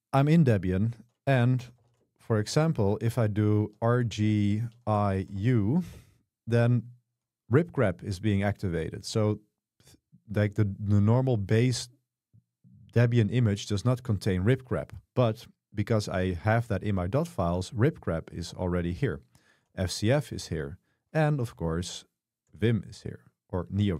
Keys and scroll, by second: 1.4-5.9 typing, 6.0 Return, 22.6 v.